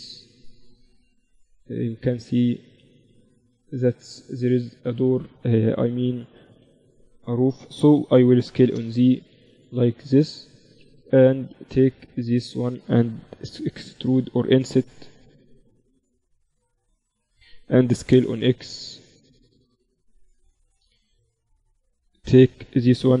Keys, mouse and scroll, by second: 2.0 ctrl+e, 3.2 ctrl+r, 6.4 s, 7.8 s, 9.3-11.0 middle drag, 11.0 click, 11.1-13.0 right drag, 11.1 z, 11.5-13.5 drag, 11.8 z, 14.6 i, 17.9 s, 20.1 z, 20.8-23.2 middle drag.